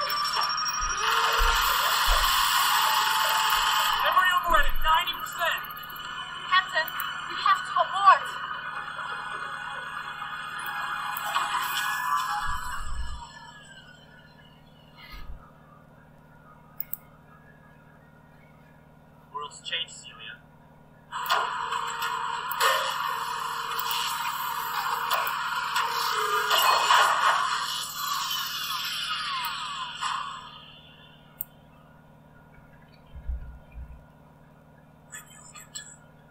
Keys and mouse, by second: 0.2-4.0 drag, 6.8-7.9 drag, 10.8 click, 12.2-13.4 typing, 15.0 Return, 16.9 click, 17.6-19.2 drag, 21.1-23.3 drag, 24.1 click, 25.3 click, 29.4-32.2 drag, 32.5 Caps_Lock, 32.8-34.0 typing.